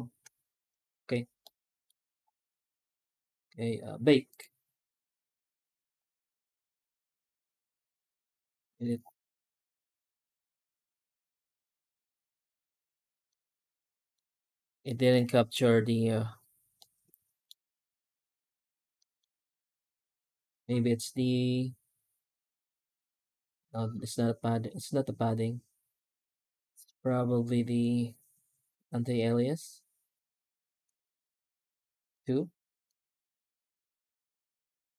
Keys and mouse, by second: 0.0 ctrl+space, 1.4-1.7 middle drag, 4.2-6.3 drag, 13.1 middle click, 14.9 middle click, 16.7 middle click, 18.8 middle click, 30.7-32.1 drag, 32.8-34.9 drag.